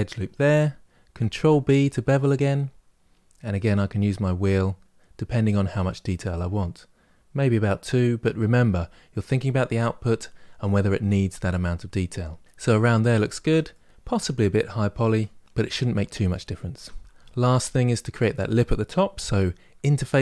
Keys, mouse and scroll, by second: 1.1 ctrl+b, 12.5 middle click, 13.1 Tab, 13.5-15.9 middle drag, 16.5 Tab, 17.0 shift+middle click, 17.5-20.2 scroll up 1.